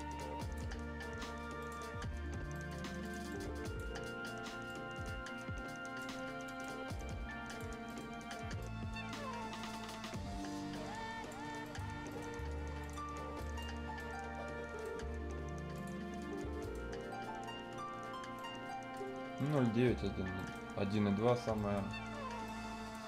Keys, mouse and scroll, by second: 2.0 scroll down 1, 2.2-2.5 scroll up 1, 2.5 right click, 3.0 click, 3.9 scroll up 1, 4.6-6.2 drag, 6.2 scroll down 1, 6.4 right click, 6.9 click, 7.7 scroll up 1, 7.8 right click, 8.6-11.4 drag, 11.4 scroll down 1, 11.6 right click, 11.9 scroll up 1, 12.1 right click, 12.8 click, 13.2 scroll down 1, 13.4 right click, 13.7 scroll up 1, 13.9 right click, 14.9 scroll down 1, 15.7 click, 16.1 scroll down 1, 16.2-16.6 scroll up 1, 16.6 right click, 19.1 scroll down 1, 19.3 right click, 19.6-20.0 scroll up 1, 20.0 scroll down 1, 20.3 right click, 20.7-21.0 scroll up 1, 21.5 right click, 22.0 scroll up 1, 22.2 scroll, 22.4 right click.